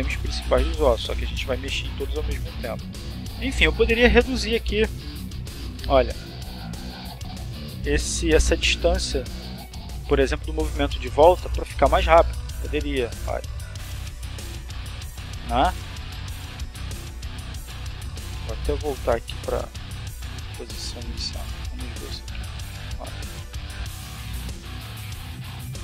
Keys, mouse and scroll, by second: 1.7 right click, 2.5 g, 5.8 click, 6.9 click, 8.5 click, 10.0 click, 11.2 click, 12.0-15.2 drag, 15.9 r, 17.5 click, 18.1-18.9 drag, 19.7 click, 21.1 click, 21.7 click, 23.1 click, 24.1 click, 24.7-25.8 drag.